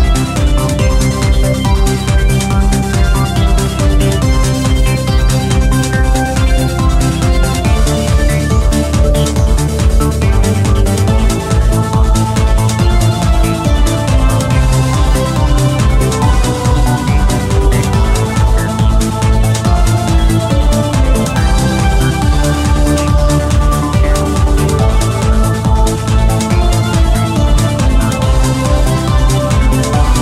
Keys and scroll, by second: 0.0-11.6 typing, 13.3-17.2 typing, 19.0-24.0 typing, 27.7 f.